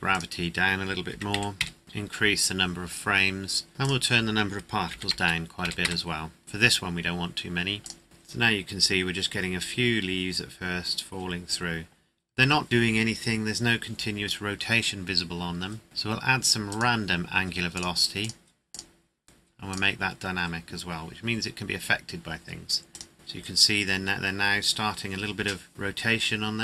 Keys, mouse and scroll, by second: 0.1 click, 1.3 KP_1, 1.6 KP_Enter, 3.2-3.6 scroll up 1, 3.8 click, 4.9 KP_1, 5.1 KP_0, 5.8 KP_Enter, 7.8 click, 14.2-14.6 scroll down 1, 15.8 click, 22.9 click.